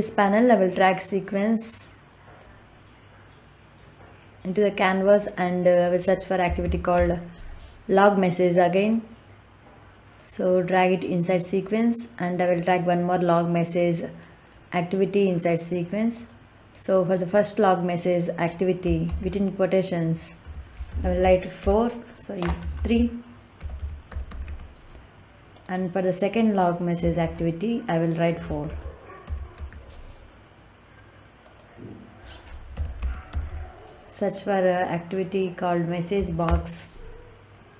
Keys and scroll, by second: 6.4 l, 6.5 o, 6.9 g, 19.0 shift+', 20.3-22.3 typing, 23.5 t, 23.7 h, 24.0 r, 24.2 e, 27.1 shift+', 28.4 f, 28.6 o, 29.1 u, 29.4 r, 32.6 m, 32.9 e, 33.2 s, 36.1 Down, 36.4 Return.